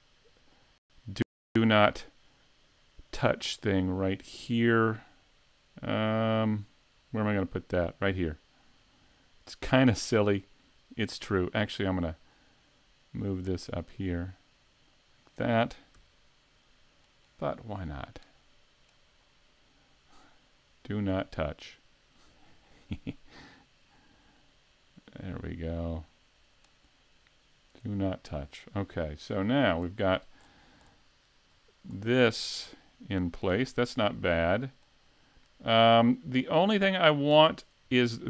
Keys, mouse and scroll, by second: 31.2 click.